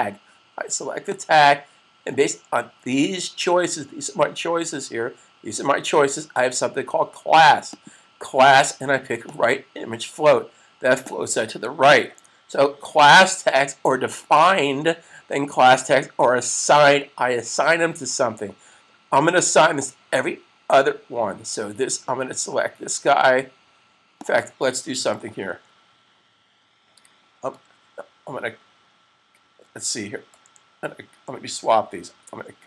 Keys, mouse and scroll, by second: 7.6 click, 11.8 super+s, 24.1 click, 25.4 super+c, 32.0 super+x.